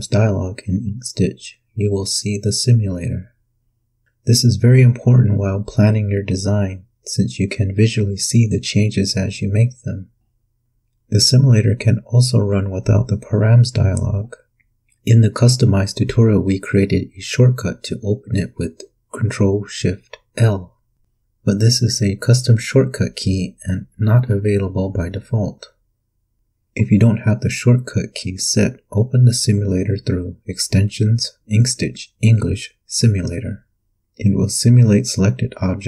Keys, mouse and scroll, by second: 2.8 click, 4.1 KP_3, 4.2 KP_5, 8.6 click, 14.1 click, 20.1 ctrl+shift+l, 26.4 click, 28.2 click, 32.6 click.